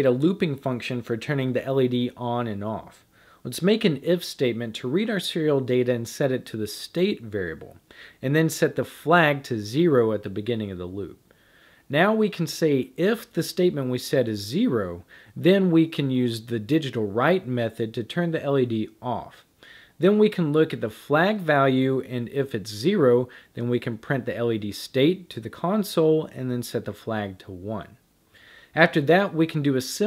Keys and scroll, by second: 0.0-4.1 typing, 5.1-8.7 typing, 10.0 typing, 12.2-27.2 typing, 28.9 typing.